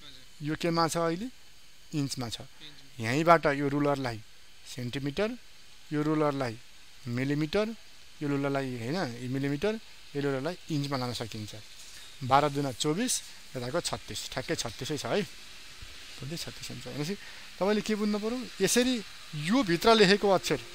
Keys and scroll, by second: 19.6 ctrl+space.